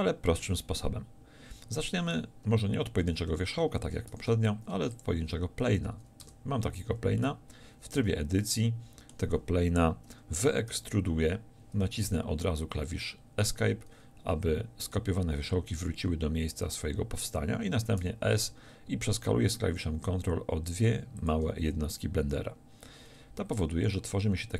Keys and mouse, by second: 4.1 shift+a, 6.3 Tab, 8.0 z, 10.7 e, 18.1 s.